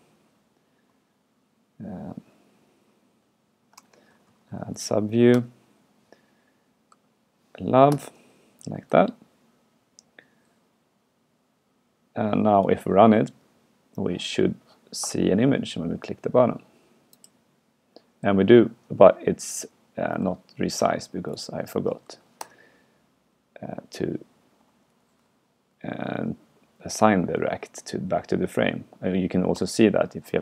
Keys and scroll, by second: 3.8 alt+BackSpace, 9.0 super+Right, 20.3 super+q, 22.1 super+Right.